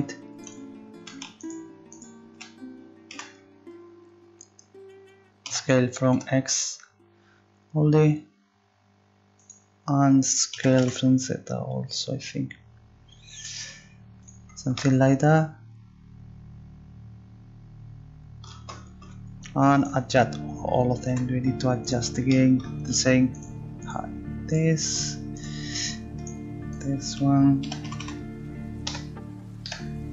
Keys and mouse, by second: 0.4 right click, 3.1 z, 5.4 z, 6.8 c, 10.5 s, 21.1 z, 21.9-28.9 right drag, 22.9-24.0 drag, 27.6 s.